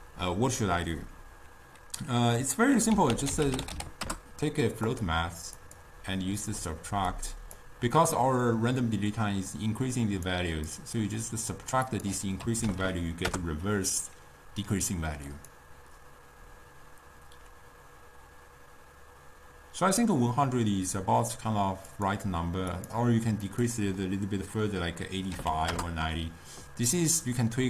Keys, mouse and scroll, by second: 5.7-9.7 drag, 10.8-12.9 drag, 12.9 0, 15.4-18.5 drag, 22.1-26.6 drag.